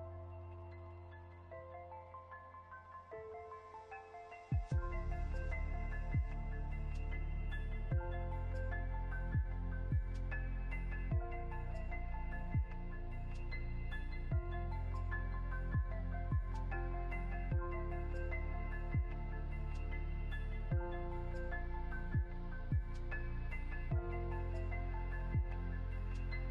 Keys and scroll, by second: 15.2 Down, 16.1 Up, 17.9 ctrl+z, 20.8 ctrl+shift+z, 22.5 Down.